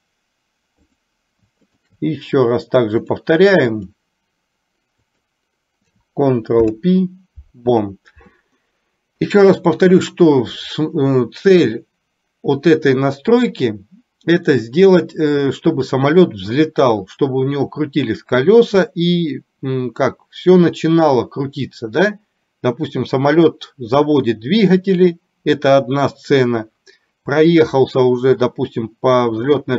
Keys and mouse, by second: 1.9 shift+click, 3.3 click, 5.3 click, 6.7 ctrl+p, 9.4 middle click.